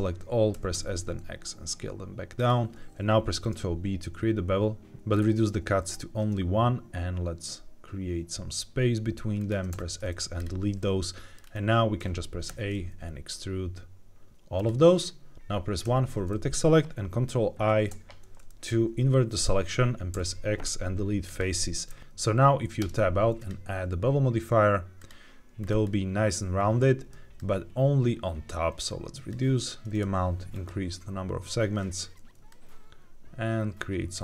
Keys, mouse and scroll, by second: 0.4 s, 0.6 x, 2.3 click, 3.3 ctrl+b, 4.9 ctrl+z, 4.9 scroll down 3, 6.4-7.0 scroll down 1, 9.3 shift+click, 9.6 x, 10.7 middle click, 11.3-11.9 scroll down 2, 11.9 a, 12.4 e, 14.5 click, 15.8 1, 17.5 ctrl+i, 20.0 x, 22.0 ctrl+z, 22.0 click, 22.7 Tab, 23.3-25.0 drag, 25.5-26.3 scroll up 2, 26.3-27.0 scroll up 1, 27.3-29.3 shift+drag, 30.4 click, 32.4-34.1 shift+drag.